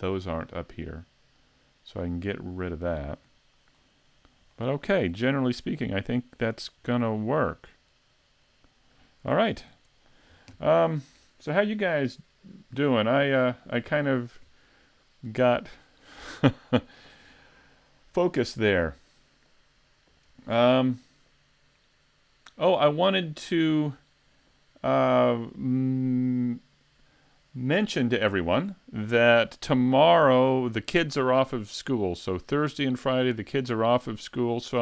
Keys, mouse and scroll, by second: 0.9 middle click, 3.3 scroll down 2, 3.8 scroll up 3, 4.4 middle click, 4.5 shift+middle click, 5.2 middle click, 6.9 scroll down 2, 7.7 middle click, 8.4 scroll up 2, 9.3 s.